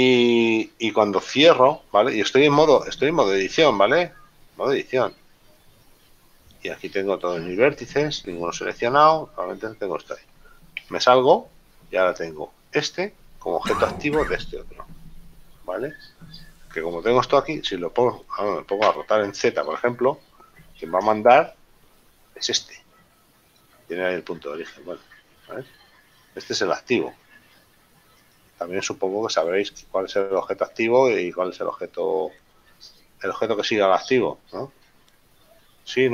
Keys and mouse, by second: 11.2 Tab, 19.1 r, 19.7 z, 23.7 right click, 28.5 right click, 30.7 shift+right click.